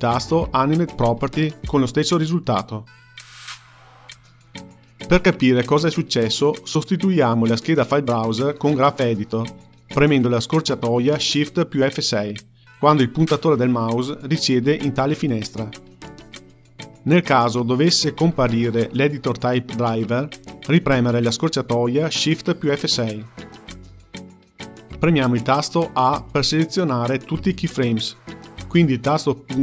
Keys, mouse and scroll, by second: 12.2 shift+F6, 17.4-25.5 drag, 25.5 a, 28.9 KP_Decimal.